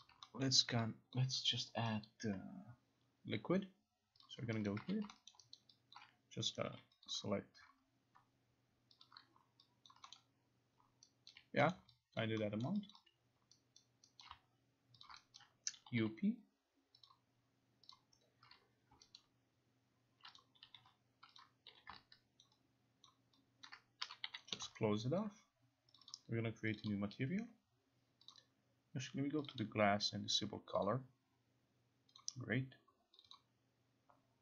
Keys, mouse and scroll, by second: 0.1 click, 0.5 alt+middle click, 0.8 alt+right click, 1.2 alt+click, 2.1 alt+right click, 4.3 click, 4.7 alt+click, 4.9 q, 5.4 alt+middle click, 5.6 alt+click, 7.1 click, 8.2 click, 8.7 click, 9.1 shift+click, 9.9 alt+click, 10.2 middle click, 11.4 alt+click, 11.8 middle click, 12.3 alt+click, 12.8 alt+middle click, 13.0 alt+click, 13.9 alt+right click, 14.3 alt+right click, 15.1 alt+click, 15.1 shift+click, 15.5 right click, 15.9 u, 17.1 click, 18.0 click, 19.0 click, 19.3 alt+right click, 20.5 click, 20.5-21.4 typing, 21.5 click, 22.5 ctrl+click, 23.2 ctrl+click, 23.7 ctrl+click, 23.9-24.9 typing, 24.6 click, 25.3 alt+click, 26.0 click, 26.2 click, 26.9 click, 28.4 click, 29.6 click, 30.3 click, 30.9 click, 32.3 click, 33.3 click, 33.4 click.